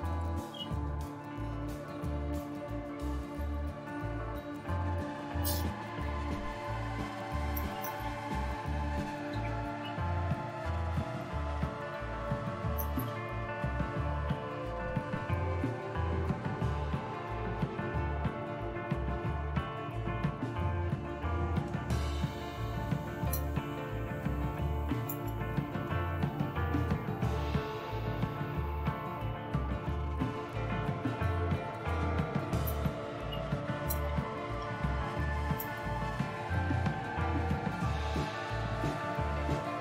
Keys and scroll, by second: 0.7-1.3 typing, 2.4 Return, 3.2-4.4 typing, 5.7-6.4 typing, 7.5 typing, 10.8-14.8 typing, 15.9-17.9 typing, 21.2 Return, 22.3-28.5 typing, 31.9-39.8 typing.